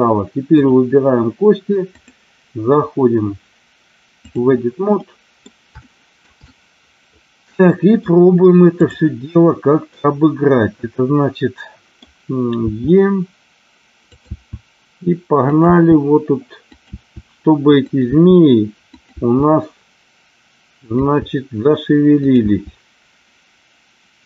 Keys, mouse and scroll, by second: 0.5 click, 1.9-4.4 drag, 4.9 middle click, 5.8 shift+middle click, 6.3-7.9 middle drag, 8.7 click, 9.9-11.9 middle drag, 12.6 e, 14.0 click, 14.2 e, 15.4 click, 15.5 e, 16.7 click, 16.8 e, 17.8 click, 18.1 e, 18.8 click, 19.1 e, 20.8 click, 20.9 e, 22.2 click, 22.4 e.